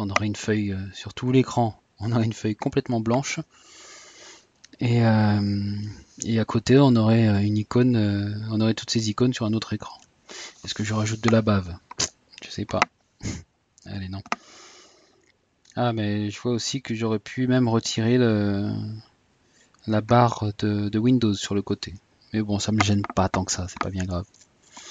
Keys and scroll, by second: 13.1 typing.